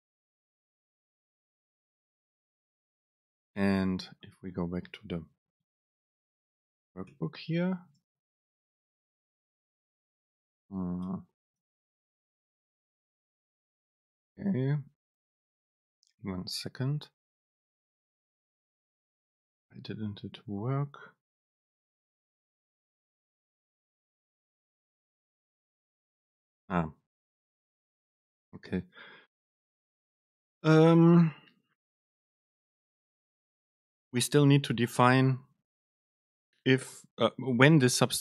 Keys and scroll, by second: 5.1 BackSpace, 6.4 super+space, 11.1 BackSpace, 11.8 super+space, 12.4 BackSpace, 21.3 super+space, 33.9 Down, 35.5 Up.